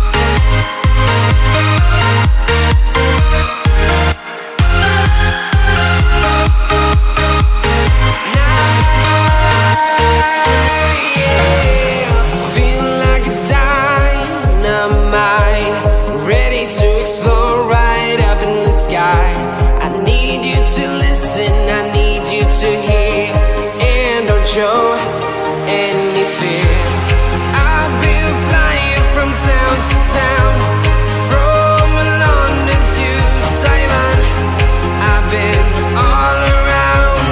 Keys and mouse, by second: 0.2 click, 0.2 middle click, 1.0-2.2 drag, 2.8 click, 3.8 middle click, 4.2 KP_0, 4.6 middle click, 5.5 shift+middle click, 6.3 r, 7.6 click, 8.5 click, 9.2-10.5 drag, 10.6 click, 11.2 r, 12.4 click, 13.0 click, 14.2 click, 14.3 middle click, 17.3 middle click, 18.7 click, 19.0 KP_0, 19.2 KP_0, 19.7 click, 21.5 click, 22.2-23.4 drag, 23.8 click, 24.5 click, 25.4 KP_0, 25.8 click, 26.2 KP_0, 27.0 click, 27.7-29.8 drag, 28.3 ctrl+z, 29.5 KP_0, 31.9-33.7 drag, 33.7 middle click, 34.5 click, 34.8-35.8 middle drag, 37.1 middle click.